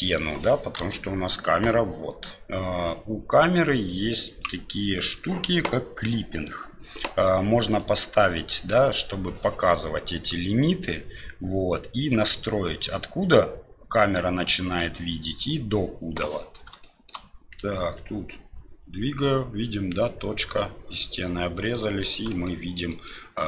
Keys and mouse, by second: 0.0 right click, 0.8 KP_7, 4.0 click, 5.0 click, 7.7 click, 8.8 click, 11.9 click, 16.9 shift+middle click, 17.9-21.6 drag, 22.4-22.7 shift+middle drag, 22.9 shift+middle click, 23.3 shift+middle click.